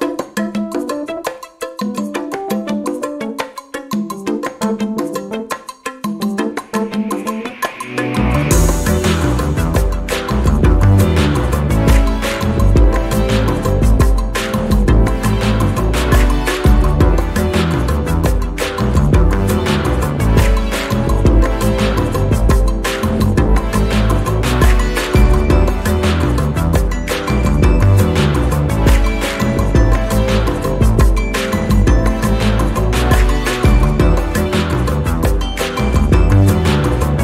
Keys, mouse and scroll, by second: 0.0 click, 1.1 ctrl+d, 1.4 ctrl+click, 2.8 ctrl+click, 3.9 ctrl+d, 4.1 ctrl+click, 5.4 ctrl+d, 5.5-7.2 ctrl+drag, 7.5 ctrl+click, 8.9 click, 9.9 click, 11.6 click, 12.4 click, 13.7 click, 15.3 ctrl+d, 15.7-17.2 ctrl+drag, 17.5 ctrl+d, 17.7-19.3 ctrl+drag, 20.4 click, 20.9 click, 21.9 click, 23.9 click, 26.2 click, 28.4-30.5 drag, 33.7-35.9 ctrl+shift+drag, 37.0 ctrl+shift+click.